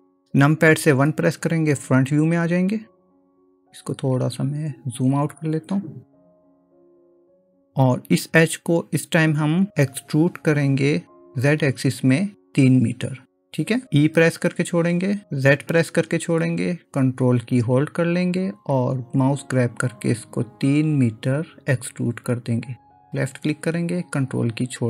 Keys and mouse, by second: 1.0 KP_1, 3.2 click, 6.5-7.5 drag, 14.5 e.